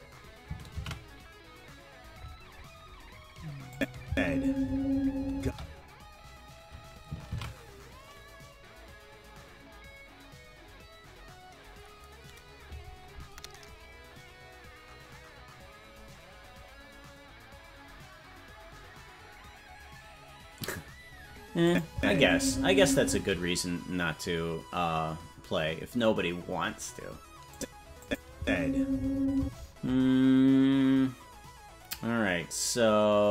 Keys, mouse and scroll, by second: 3.2 ctrl+s, 3.7 click, 4.0 space, 5.4 space, 9.7 ctrl+s, 21.6 click, 21.9 space, 23.0 space, 27.5 click, 28.0 click, 28.3 space, 29.4 space.